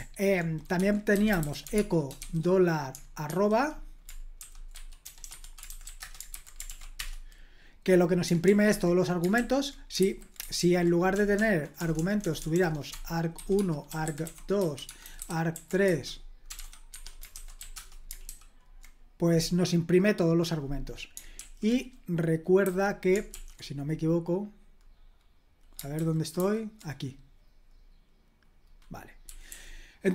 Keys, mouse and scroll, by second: 0.5-2.2 typing, 3.3 typing, 4.4-6.3 typing, 5.3 Escape, 6.7 ctrl+p, 7.0 Return, 8.4 super+l, 9.3 super+k, 10.0 super+h, 10.6 ctrl+p, 11.1-18.1 typing, 18.3 Escape, 21.3 super+l, 22.6 h, 23.3 super+l, 25.9 super+h, 26.4 super+h, 29.2 k, 29.5 k.